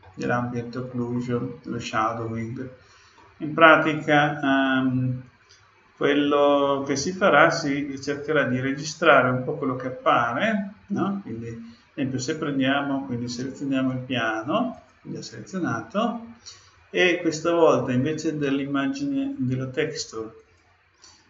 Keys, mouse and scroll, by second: 0.0-1.3 middle drag, 1.7 middle click, 1.8-2.4 scroll up 1, 2.4-3.1 scroll down 1, 4.7 middle click, 6.9-8.8 drag, 14.7-16.5 drag, 16.6-18.3 drag, 20.3-21.2 drag.